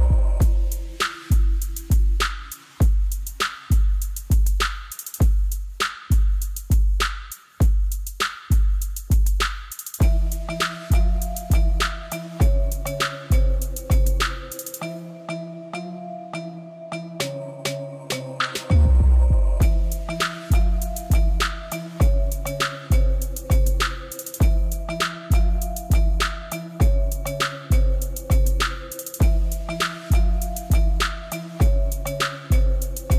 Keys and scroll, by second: 10.0 alt+a, 28.6 Tab.